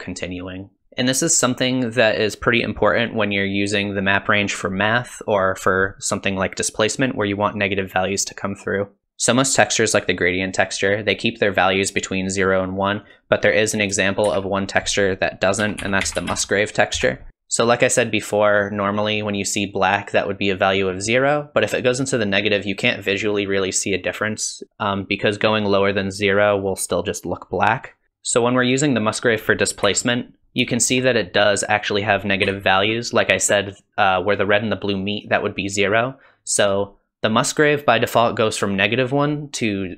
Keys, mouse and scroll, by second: 13.0 click, 14.3 shift+a, 28.0 click, 28.6 middle click, 29.9 KP_1, 30.4 shift+middle click, 30.4 scroll down 2, 30.7 shift+middle click, 31.2 scroll down 1, 31.5 middle click, 32.5 KP_1.